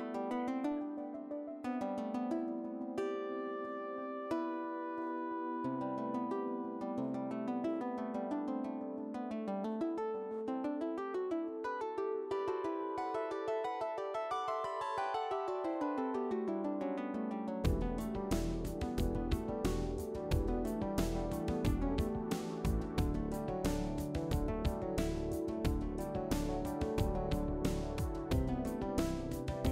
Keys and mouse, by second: 0.9-4.0 typing, 1.1 click, 1.9 click, 4.5 click, 5.0 e, 5.1 click, 5.4 s, 5.9 click, 6.2 s, 6.8 ctrl+r, 7.6 ctrl+r, 8.0 s, 8.4 click, 9.3 shift+middle click, 9.6 shift+click, 10.1-13.3 typing, 10.5 click, 11.2 click, 11.9 click, 12.5 shift+middle click, 12.8 click, 14.1 ctrl+r, 14.4 ctrl+r, 15.3 ctrl+r, 15.9-22.1 typing, 17.6 click, 18.2 ctrl+r, 19.6 click, 20.4 ctrl+r, 21.1 shift+middle click, 21.3 alt+click, 21.8 click, 22.9 click, 23.3 s, 23.8 ctrl+r, 24.4-26.8 typing, 24.7 alt+click, 25.9 alt+click, 26.5 click, 26.9 click, 28.0 ctrl+r, 28.6 middle click, 28.8 alt+click.